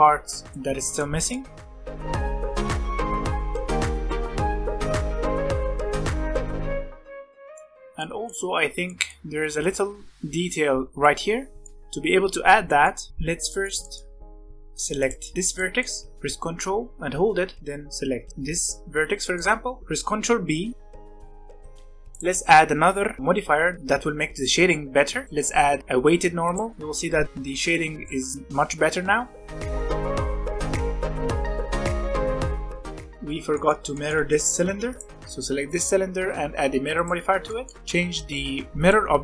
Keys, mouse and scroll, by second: 1.4 Tab, 1.7 scroll up 2, 1.7 shift+middle click, 1.9 1, 2.2 click, 2.4 shift+click, 2.5 middle click, 2.7 g, 3.4 scroll down 1, 3.4 middle click, 3.8 scroll up 2, 4.0 click, 4.3 g, 4.7 scroll down 1, 4.7-5.9 middle drag, 6.0 shift+click, 6.4 g, 6.9 shift+middle click, 7.8 scroll down 2, 7.9 middle click, 8.4-8.8 scroll up 1, 8.8-13.1 middle drag, 13.1-13.4 scroll up 2, 13.4 middle click, 14.0 scroll up 1, 14.2 middle click, 14.4-14.9 scroll down 1, 14.9 click, 15.2-17.6 shift+middle drag, 18.3-20.6 shift+middle drag, 20.6 ctrl+b, 22.1 click, 23.2 middle click, 23.2 alt+a, 25.2-26.5 drag, 26.7-27.2 middle drag, 27.2 scroll up 1, 27.5-28.0 scroll down 1, 28.0-29.4 middle drag, 29.4 click, 29.6 middle drag, 29.7 alt+a, 29.7 click, 30.0 click, 30.4 middle click, 30.4 alt+a, 30.5 click, 30.9 click, 31.2 middle click, 31.3 alt+a, 31.3 scroll up 1, 31.4-32.5 middle drag, 32.6 scroll up 2, 32.7 middle click, 32.7 click, 32.8 scroll down 4, 32.8 middle click, 32.9-33.5 scroll up 2, 33.1 middle click, 33.5-34.6 middle drag, 34.6 alt+a, 34.8 click, 35.6-37.3 drag, 37.3 scroll down 2, 37.4-38.7 middle drag, 38.7 click.